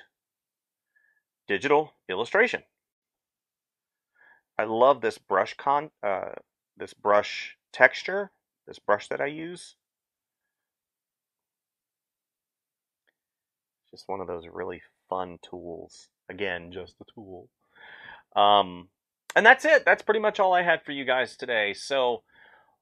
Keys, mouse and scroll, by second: 0.4 space.